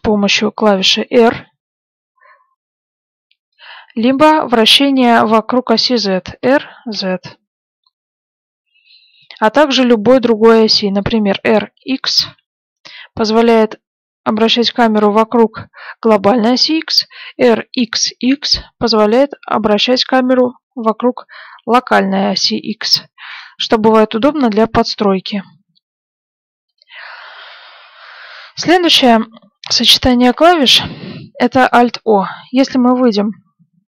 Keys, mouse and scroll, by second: 1.1 r, 7.1 r, 10.6 r, 31.1-33.9 middle drag.